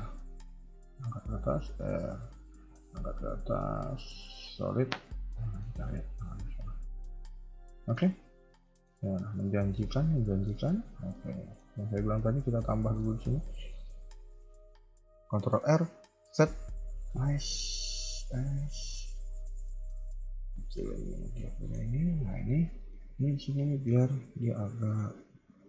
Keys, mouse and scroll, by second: 0.0 g, 1.5 r, 2.6 g, 3.9 z, 4.5 KP_3, 4.8 scroll down 3, 5.0 middle click, 5.6-6.5 scroll up 2, 5.7 KP_3, 6.5-7.5 scroll up 4, 6.8 shift+middle click, 7.5 middle click, 8.0 KP_1, 8.6 shift+middle click, 8.9-9.3 scroll up 2, 9.3 middle click, 9.9 scroll down 2, 10.1 middle click, 10.6 a, 10.8 a, 10.9 scroll down 2, 11.1 middle click, 12.0 ctrl+s, 12.2-12.5 scroll up 2, 12.5 middle click, 15.4 ctrl+r, 17.5 s, 20.8 KP_1, 21.0 KP_3, 21.1 scroll down 3, 21.3 middle click, 21.8-22.1 scroll up 2, 21.9 a, 22.5 a, 22.6 shift+middle click, 23.1-24.3 scroll up 2.